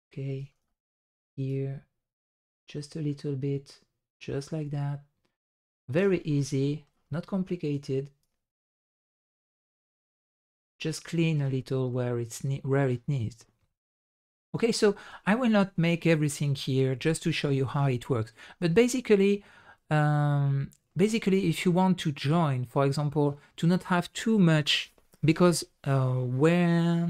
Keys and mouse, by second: 0.6 shift+drag, 6.6 middle click, 7.0 shift+middle click, 8.2 ctrl+click, 10.8 middle drag, 11.4 shift+middle drag, 11.8-13.8 middle drag, 15.8 middle drag, 16.5 middle drag, 17.8 middle click, 18.7 drag, 19.7-20.8 middle drag, 21.5-23.2 middle drag, 24.6 middle drag.